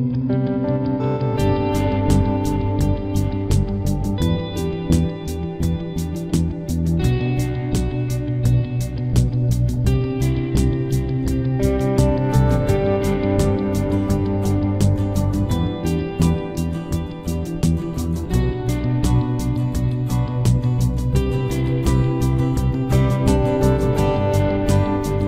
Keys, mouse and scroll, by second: 0.8 ctrl+r, 2.5 right click, 2.7 b, 3.1 g, 5.3 ctrl+r, 6.5 click, 7.2-8.9 right drag, 7.5 b, 7.9 g, 10.0 ctrl+r, 11.2-12.9 right drag, 11.4 b, 11.8 g, 12.6 b, 13.0 g, 14.0 ctrl+s, 15.8 ctrl+e, 17.0 ctrl+s, 20.3-22.0 middle drag, 24.1-25.2 middle drag.